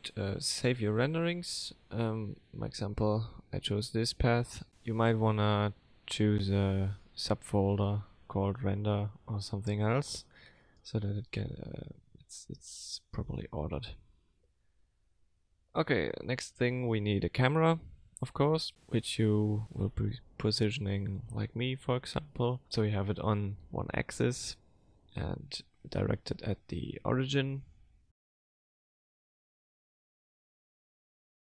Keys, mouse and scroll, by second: 7.1 middle click, 9.7 click, 14.9 middle click, 15.5 shift+middle click, 15.7 F3, 18.2 scroll down 1, 18.8 g, 21.6 n, 23.1 click, 26.0 click, 27.2 middle click, 28.8 click, 29.4 click, 30.5 middle click.